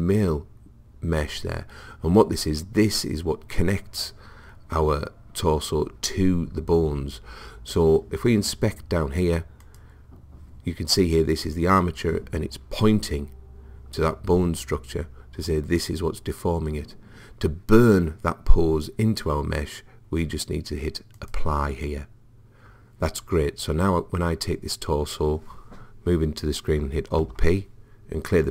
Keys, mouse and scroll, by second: 9.6 click, 21.2 click, 27.2 alt+p.